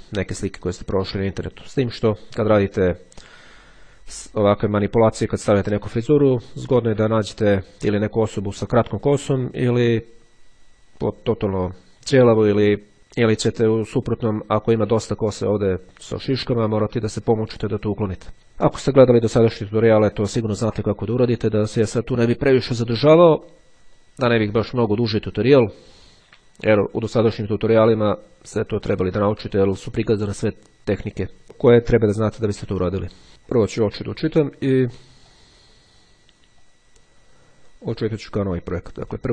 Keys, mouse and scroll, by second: 35.4 click, 36.5-39.3 drag.